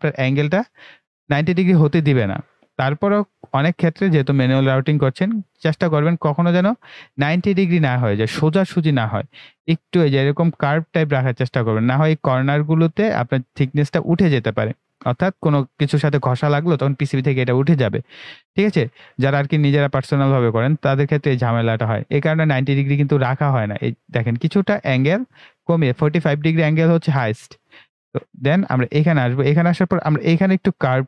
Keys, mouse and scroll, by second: 29.2 click.